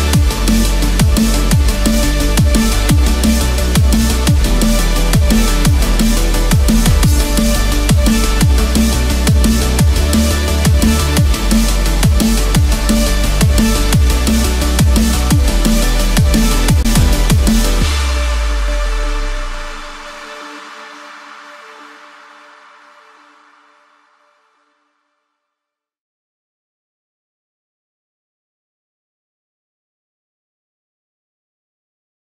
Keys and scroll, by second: 10.9 Escape, 12.7 ctrl+=, 19.6 ctrl+-, 21.9 ctrl+z.